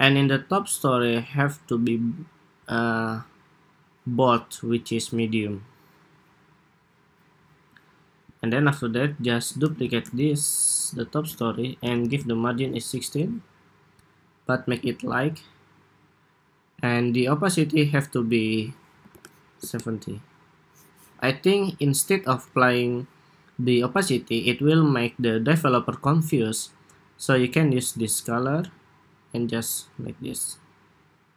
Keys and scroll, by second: 9.4 super+d, 11.5 alt+Right, 11.7 alt+Right.